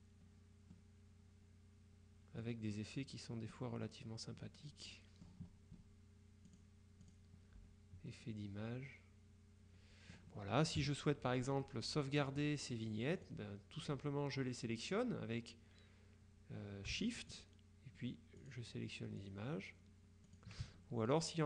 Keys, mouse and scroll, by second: 0.9-3.0 middle drag, 3.9 click, 6.6 click, 8.2-10.7 middle drag, 10.7 scroll up 2, 10.9 KP_Subtract, 11.7-12.8 drag, 13.3 click, 17.4 shift+click, 18.5 click, 19.3 click, 20.3 click.